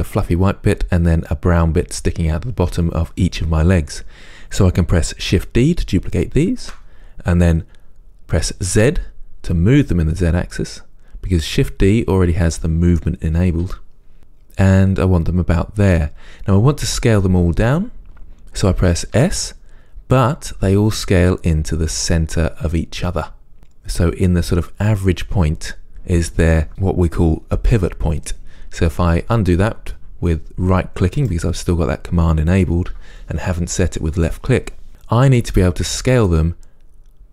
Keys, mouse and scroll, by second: 6.8 shift+d, 16.2 click, 19.5 s, 35.6-37.3 middle drag.